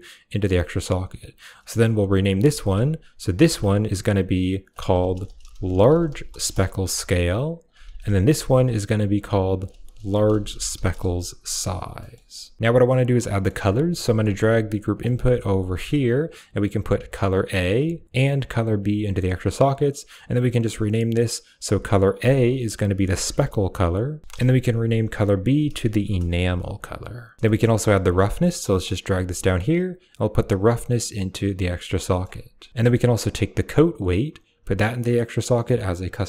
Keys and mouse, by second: 1.2 click, 2.0 click, 2.2-2.9 ctrl+drag, 3.0-6.3 ctrl+drag, 7.4 click, 7.5-8.0 ctrl+drag, 8.2-10.8 ctrl+drag, 11.8 middle click, 12.6 click, 13.1 middle click, 13.4 g, 13.7 click, 13.9 middle click, 14.1 g, 14.7 click, 14.9 middle click, 15.6 middle click, 16.6-17.6 drag, 18.0-18.7 drag, 18.8 click, 19.9 click, 21.6 click, 21.7-24.2 drag, 24.2 BackSpace, 25.2 click, 25.3 click, 27.4 middle click, 27.7 click, 28.3 g, 28.5 click, 28.7 middle click, 29.1 middle click, 30.0-31.0 drag, 31.9 middle click, 32.7 middle click, 34.1-36.0 drag.